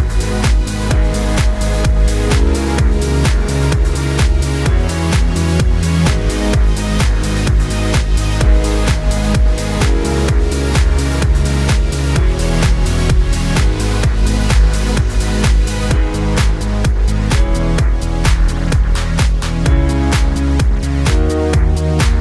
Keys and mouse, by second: 1.2 s, 1.5 middle click, 2.1-15.4 drag, 5.6 x, 15.1 Tab, 15.4-22.2 middle drag.